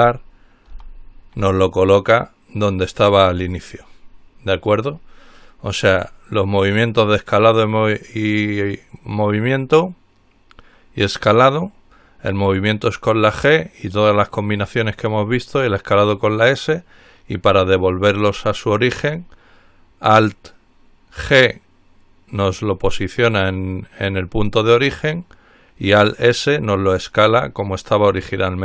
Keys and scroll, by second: 0.9 alt+g.